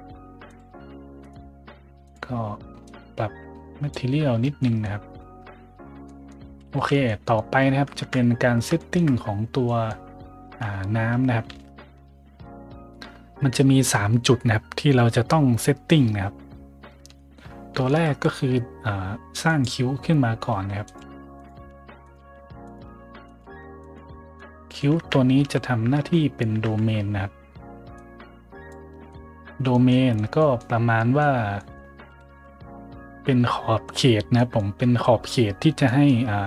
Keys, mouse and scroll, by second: 0.4 click, 1.1 click, 2.0 click, 2.8-3.7 drag, 4.3 a, 4.5 middle click, 6.1 middle click, 6.5 z, 7.0 middle drag, 7.5 middle click, 7.9 `, 8.7 shift+middle drag, 9.6 middle drag, 10.4 `, 16.7 middle click, 17.1 shift+middle drag, 17.5 middle click, 17.5 middle click, 17.8 shift+a, 19.4 click, 19.9 middle drag, 20.4-23.4 typing, 20.8 click, 21.3 click, 22.0 click, 22.6 click, 23.2 click, 23.7 click, 24.3-24.7 middle drag, 24.9 `, 25.3 z, 25.9 `, 26.5 `, 27.9-28.6 drag, 29.0-29.7 middle drag, 29.8 middle drag, 30.3 middle click, 30.9 scroll up 1, 31.5 scroll up 1, 31.8-32.7 typing, 33.8 click, 34.3 middle drag, 34.7-36.0 middle drag.